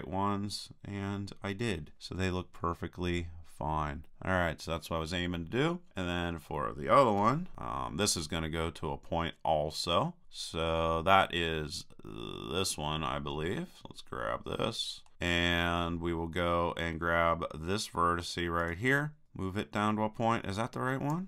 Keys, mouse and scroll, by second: 6.2-7.2 middle drag, 7.2 KP_3, 13.5 middle click, 13.7-15.1 middle drag, 18.6-20.1 right drag, 19.2-21.0 drag.